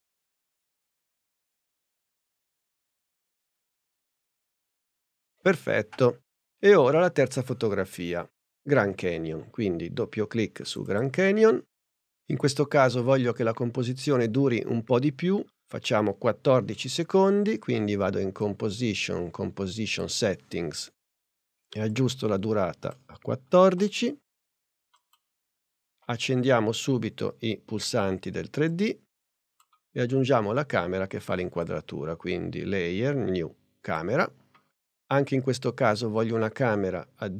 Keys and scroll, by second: 23.8 4.